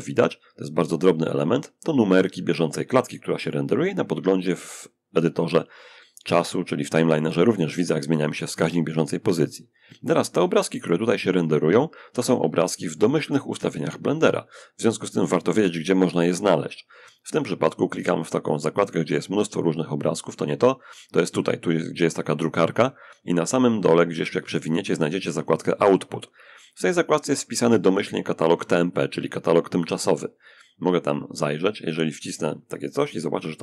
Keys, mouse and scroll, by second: 11.3 Escape, 12.7 Escape, 17.7 click, 19.6 click, 22.2-24.2 scroll down 1, 31.0 click.